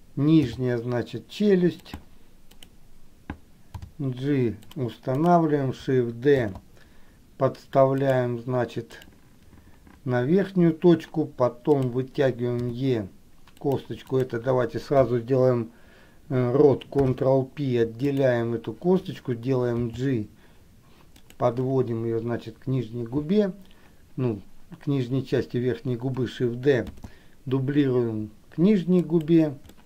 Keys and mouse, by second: 0.7 g, 2.7 click, 5.4 click, 6.6 shift+d, 9.1 click, 12.1 click, 14.4 click, 17.1 alt+p, 20.1 g, 27.1 shift+d.